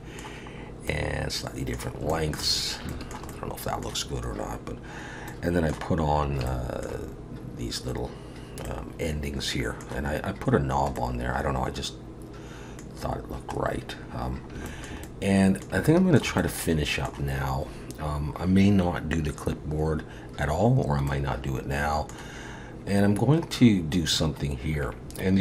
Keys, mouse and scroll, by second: 0.7 scroll up 1, 0.9 middle click, 2.1 shift+middle click, 2.6 scroll up 2, 2.9 shift+middle click, 3.3 middle click, 4.2-5.0 scroll up 2, 5.0 scroll up 1, 5.3 middle click, 6.1 scroll up 2, 6.5 shift+middle click, 8.7 middle click, 10.6-11.0 scroll down 1, 11.0 middle click, 13.0-13.6 scroll down 2, 13.6-14.7 scroll down 5, 14.7 shift+middle click, 15.0 middle click, 15.9 shift+middle click, 16.4 middle click, 21.1 middle click.